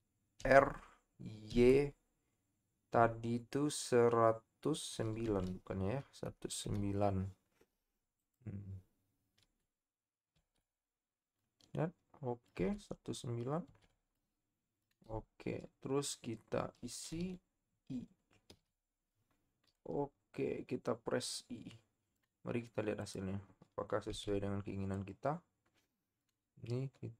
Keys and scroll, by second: 0.6 r, 1.5 y, 5.5 1, 6.6 typing, 10.4 KP_3, 24.3 z.